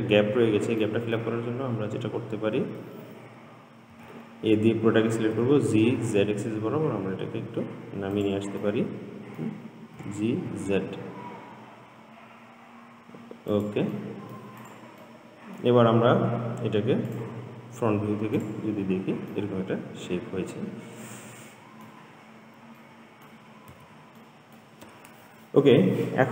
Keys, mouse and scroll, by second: 1.1-4.2 middle drag, 4.2 a, 5.6 g, 8.8-10.2 middle drag, 10.2 g, 14.2 middle click, 14.9 click, 15.3 middle click, 16.1-16.6 scroll down 4, 17.3 click, 18.1-18.6 scroll up 2, 18.6 click, 19.2 scroll down 2, 19.6-22.5 middle drag, 22.5-23.0 scroll up 1, 23.0 middle click, 24.0 Tab, 24.5-26.3 middle drag.